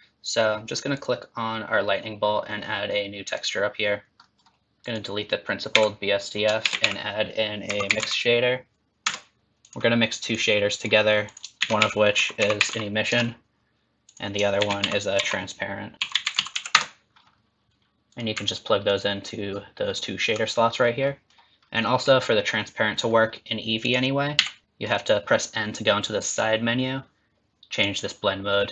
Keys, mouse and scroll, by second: 0.9 click, 3.2 click, 4.2 middle click, 4.8 click, 5.8 x, 6.6 shift+a, 10.3 click, 11.3 click, 11.6 shift+a, 14.6 shift+a, 18.5 alt+right click, 19.5 alt+right click, 20.5 middle click, 21.1 middle click, 21.8 middle click, 23.8 click, 24.4 n, 26.3 click, 27.7 click.